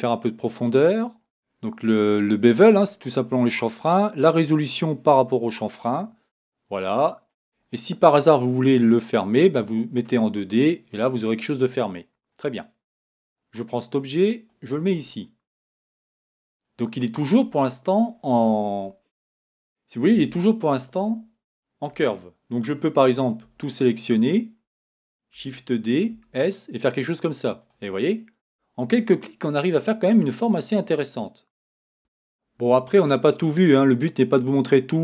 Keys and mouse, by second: 6.3-10.0 middle drag, 11.1 middle click, 14.5-15.8 drag, 15.8 middle click, 18.9 middle click, 19.4 middle click, 20.1 Tab, 23.0 a, 25.4 shift+d, 28.0 click, 29.2 click, 31.9-35.0 middle drag.